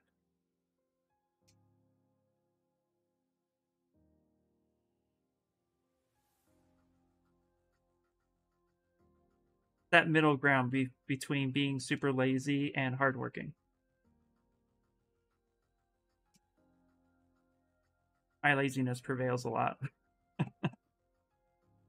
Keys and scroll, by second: 2.5 s, 3.6 b, 4.1 p, 8.4 b, 12.4 s, 16.8 s.